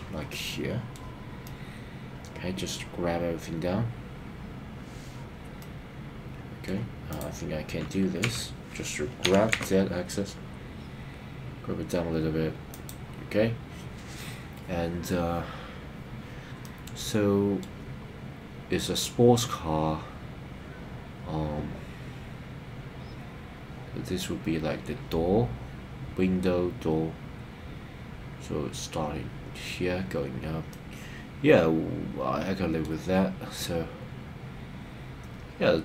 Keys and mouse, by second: 0.4 middle click, 1.4-2.7 middle drag, 5.6-6.7 middle drag, 7.1 click, 8.3 KP_3, 9.3 g, 9.5 z, 12.7 click, 16.6-17.6 middle drag, 30.7-32.9 middle drag.